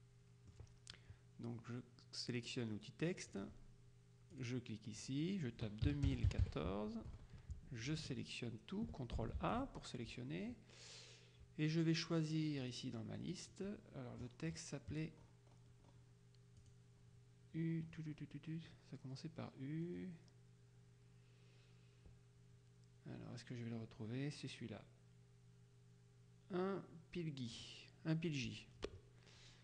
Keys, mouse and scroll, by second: 3.4 click, 4.4 click, 5.9 KP_2, 6.1 KP_0, 6.3 KP_1, 6.5 KP_4, 9.4 ctrl+a, 12.7 click, 13.4 click, 14.3-15.2 scroll down 1, 15.4-16.5 scroll up 1, 16.8 click, 17.6-18.6 scroll down 1, 19.1-19.7 scroll down 2, 20.0-20.8 scroll down 2, 22.2-23.6 scroll down 2, 27.6 click.